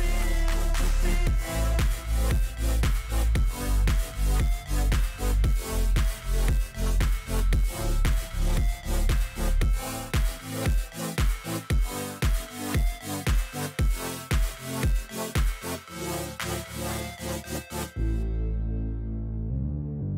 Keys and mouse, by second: 3.2-4.6 drag, 5.7 click, 8.3 click, 9.1 click, 10.5 ctrl+shift+click, 12.1-13.1 drag, 14.1 click, 16.3-17.6 drag, 18.8 click, 19.7 click.